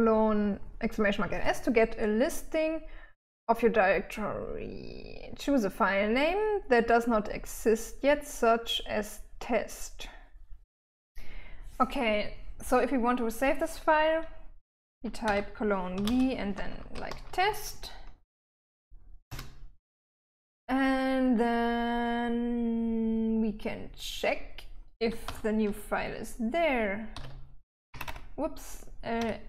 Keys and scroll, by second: 15.7-18.2 typing, 19.7 Return, 21.1 typing, 25.7-26.1 typing, 27.3-28.5 typing.